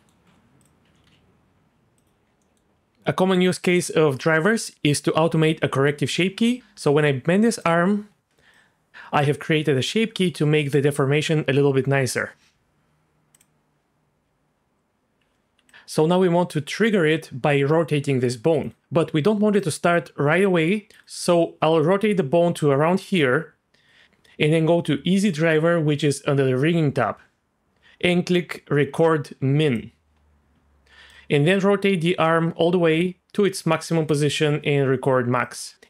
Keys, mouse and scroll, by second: 0.2 Tab, 0.6 click, 0.8 r, 1.1 x, 2.4 middle click, 7.1 Tab, 7.6 click, 8.5 click, 13.4 click, 15.2 Tab, 15.7 click, 19.5-21.0 drag, 21.4 click, 29.6 click, 31.1-34.1 drag, 35.4 click.